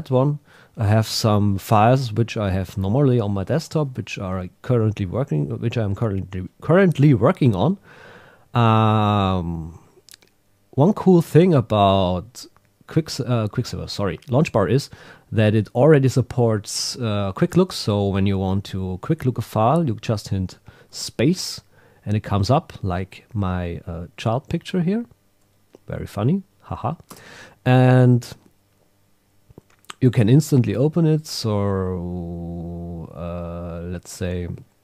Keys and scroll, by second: 9.5 Down, 12.0 Up, 12.8 Down, 30.2 Down, 33.9 Up.